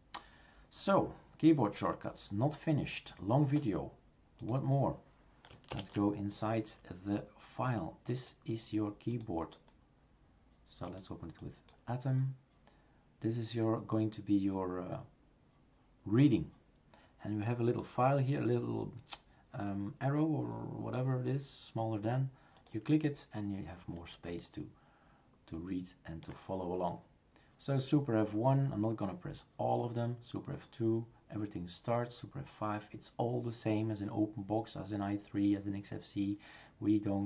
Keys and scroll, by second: 5.7 shift+super+Return.